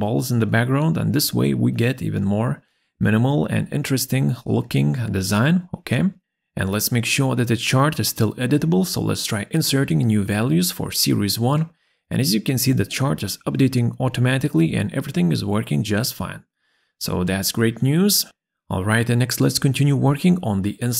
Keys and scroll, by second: 9.1 2, 9.2 7, 10.0 Return, 12.3 5, 12.4 7, 13.0 Return, 15.7 7, 16.5 Return.